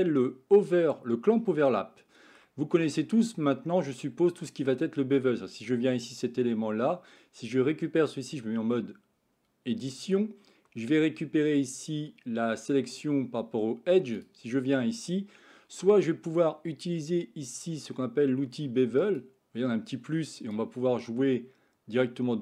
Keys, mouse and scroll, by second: 1.4-2.3 shift+middle drag, 3.4-5.2 middle drag, 5.9 click, 8.5 Tab, 14.0 click, 19.0 click, 20.4 click, 20.7-22.4 drag.